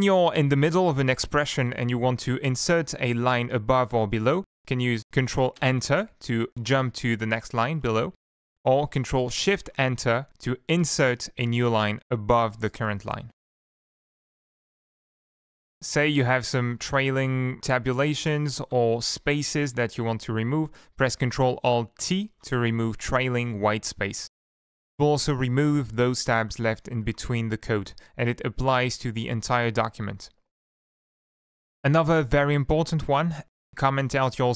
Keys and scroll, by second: 0.3 ctrl+Left, 5.8 ctrl+Return, 8.4 shift+End, 8.8 ctrl+Left, 9.1 ctrl+Left, 9.8 ctrl+shift+Return, 13.5 ctrl+z, 13.9 ctrl+z, 15.8 Up, 16.1 Tab, 16.4 Tab, 16.6 Tab, 16.9 Down, 17.3 End, 18.1 Tab, 18.2 Tab, 18.6 Down, 23.4 ctrl+alt+t, 27.6 ctrl+alt+t, 29.3 Up.